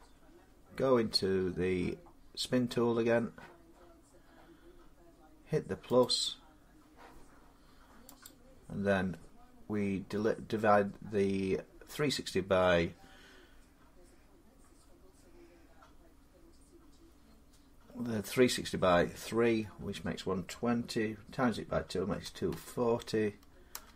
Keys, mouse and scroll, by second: 0.6-4.4 drag, 5.8-13.2 drag, 22.1 typing, 23.3-23.9 typing.